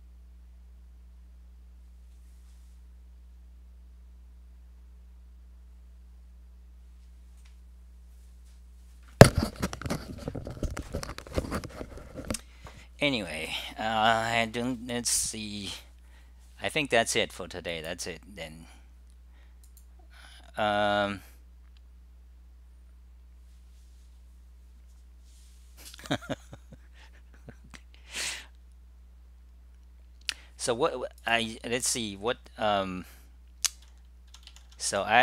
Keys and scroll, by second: 34.3-35.0 typing.